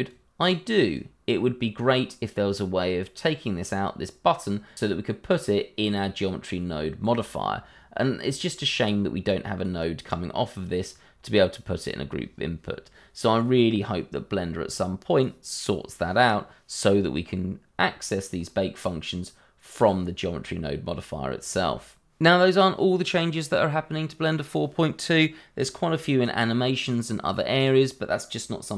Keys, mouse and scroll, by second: 9.3 click.